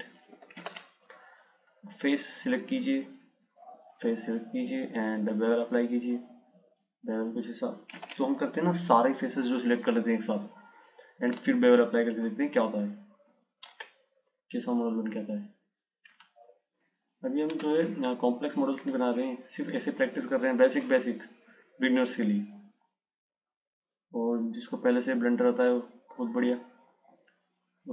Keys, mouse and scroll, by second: 0.9 ctrl+z, 2.9-4.5 drag, 5.8 click, 8.2 ctrl+z, 10.3 click, 12.6 shift+click, 13.6 shift+click, 15.4 click, 17.1 shift+click, 19.4-20.1 scroll up 1, 20.1-20.9 scroll down 1, 21.7 click.